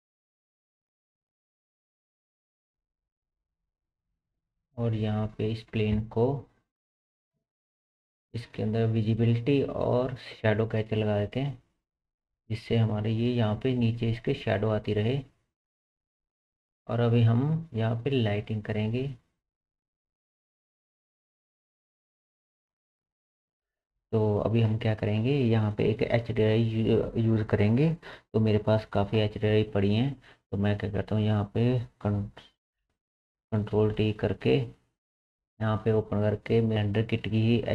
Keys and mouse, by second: 2.4-4.8 drag, 4.8 middle click, 5.0-11.8 drag, 7.8 middle click, 7.8 right click, 9.2-11.0 middle drag, 9.2-11.0 right drag, 11.8 middle click, 12.0-18.3 drag, 18.3-23.5 middle drag, 18.5 click, 18.5 right click, 18.8-23.5 drag, 18.8-23.5 right drag, 23.5 n, 32.4 click, 32.8 shift+t, 33.2 click, 33.7 ctrl+t, 34.1 click, 35.5-37.7 drag.